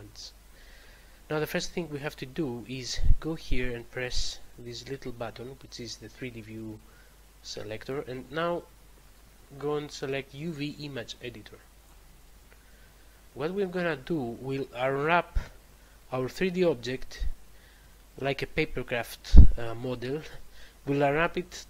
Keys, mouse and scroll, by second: 7.7 click, 11.7 click, 12.9 scroll up 1, 13.4-14.4 scroll up 1, 14.4-15.3 scroll down 1.